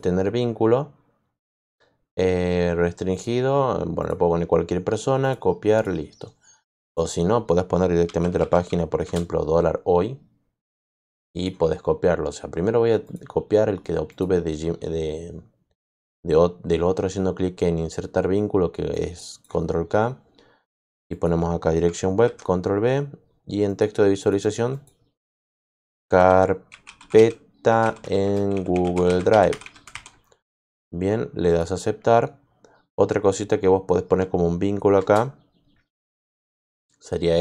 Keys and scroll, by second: 7.7-8.9 typing, 9.0 Return, 22.2 ctrl+v, 25.5-30.3 typing, 34.9 shift+Return.